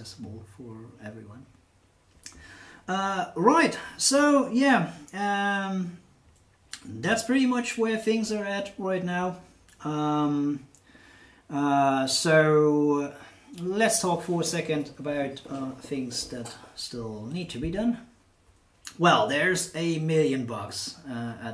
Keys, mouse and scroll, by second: 6.2-7.2 drag.